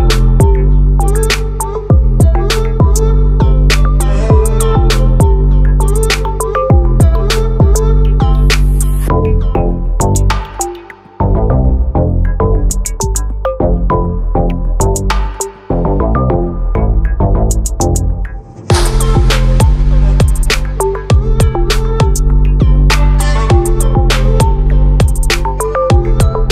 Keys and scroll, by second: 21.2 ctrl+t.